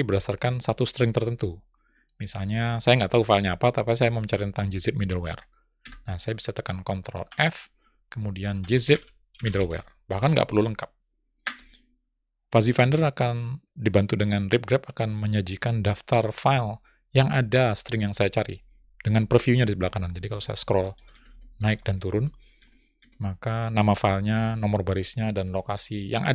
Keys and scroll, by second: 7.6 ctrl+f.